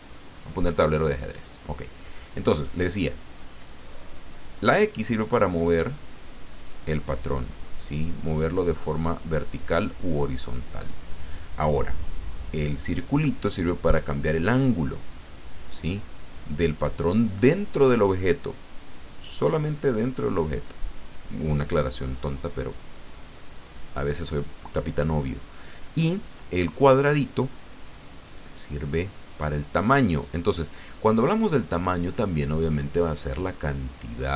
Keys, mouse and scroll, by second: 0.0 click, 5.0-11.3 drag, 14.0-20.2 drag, 28.2-34.3 drag.